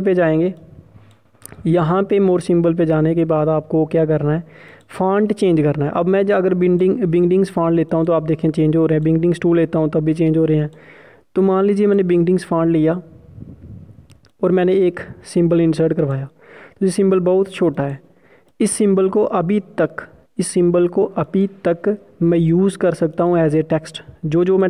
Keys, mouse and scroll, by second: 5.5 click.